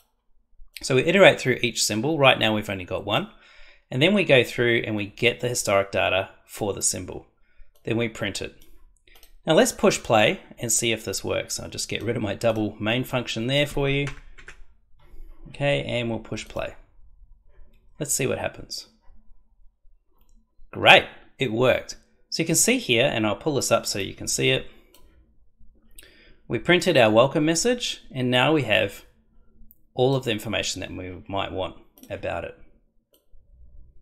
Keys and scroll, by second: 14.0 BackSpace.